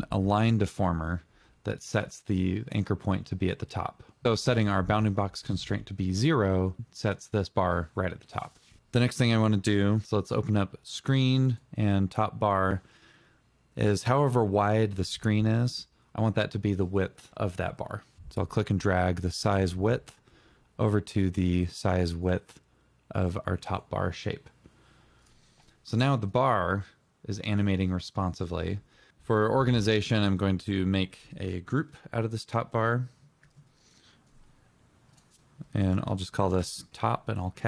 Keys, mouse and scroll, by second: 8.9 click, 9.0 double click, 10.5 double click, 29.7 click, 32.5 ctrl+g, 34.9 Return, 35.1-35.8 typing.